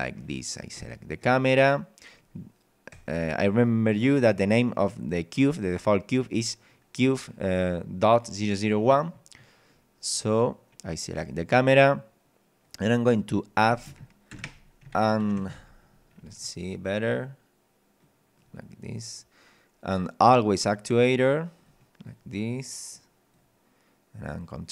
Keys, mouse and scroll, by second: 0.8 right click, 1.2 right click, 2.2 scroll up 1, 2.9 right click, 9.7 scroll down 1, 10.3 right click, 12.7 click, 13.7 ctrl+click, 15.2 ctrl+Up, 16.1-16.7 scroll up 2, 18.0 click, 18.9 scroll up 1, 19.9 click, 20.5 click, 21.6 click, 22.9 click, 24.3 click.